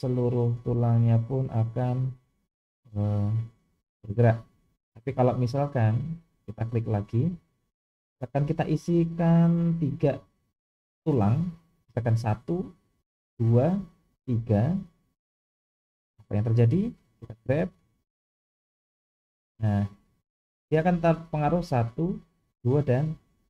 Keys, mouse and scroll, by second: 6.8 click, 8.7 click, 9.0 click, 9.2 click, 16.1 click.